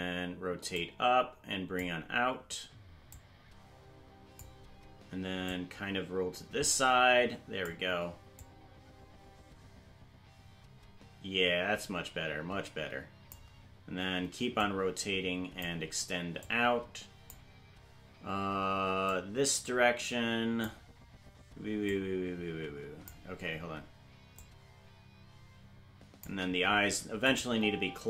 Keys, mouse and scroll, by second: 0.7 click, 3.0 click, 5.4 click, 8.3-13.3 drag, 14.5-15.6 drag, 16.3 click, 19.0-20.6 drag, 21.8-23.0 drag, 24.3-26.2 drag, 27.2 click, 27.4 space.